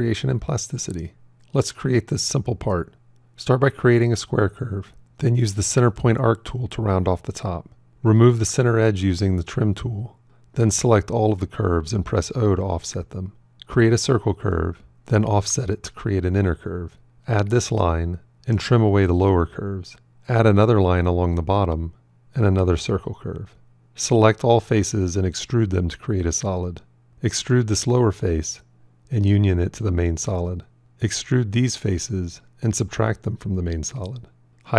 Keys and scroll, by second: 11.6 o, 13.7 shift+c, 15.3 o.